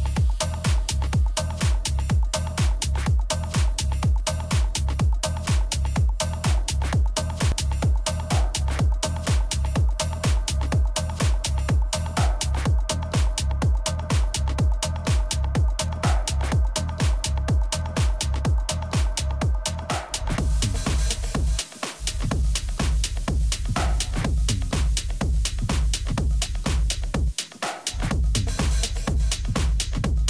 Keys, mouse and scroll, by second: 1.9-3.7 middle drag, 6.9-11.1 middle drag, 7.5 a, 10.5 Tab, 11.6-13.7 middle drag, 13.9-14.9 middle drag, 16.3-18.1 drag, 20.6-25.7 middle drag, 25.7-27.6 drag, 28.3-30.2 drag.